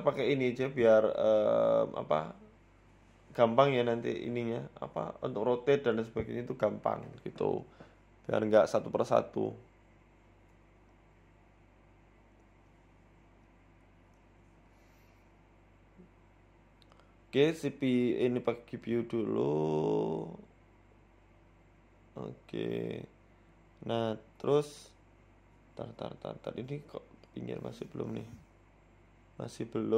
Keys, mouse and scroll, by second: 0.4 right click, 1.2 g, 2.6 s, 3.6 z, 4.3 shift+middle click, 4.6-5.4 scroll up 9, 5.4 scroll up 1, 5.4 g, 6.3 shift+middle click, 7.6 g, 10.7 z, 11.8-12.5 scroll down 1, 12.5 shift+middle click, 12.5 scroll down 3, 12.7-13.3 scroll up 4, 13.0 shift+middle click, 13.3 z, 14.5 scroll down 1, 14.6 scroll up 1, 15.3-16.2 scroll down 2, 15.5-16.2 scroll up 2, 16.2 scroll up 1, 16.4 click, 17.2 click, 22.0 click, 23.1 click, 25.7 z, 26.0 click, 27.0 shift+s, 27.7 scroll down 2, 28.2 middle click, 29.0 middle click.